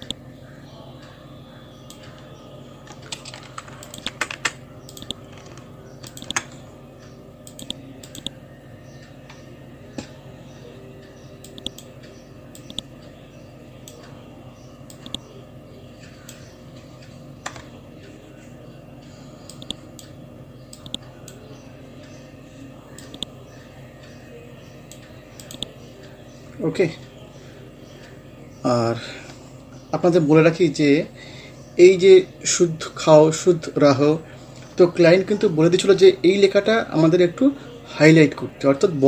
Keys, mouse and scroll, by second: 2.3 scroll up 1, 3.9 click, 4.1 Down, 4.9 click, 8.4 scroll down 1, 10.6 scroll up 1, 11.5-14.3 drag, 14.3-14.7 scroll up 1, 14.9-16.6 drag, 16.6 scroll down 1, 19.5-21.6 drag, 21.6 scroll up 1, 23.0-25.4 drag, 25.8 scroll down 1, 27.5 scroll up 1, 32.4 scroll up 1.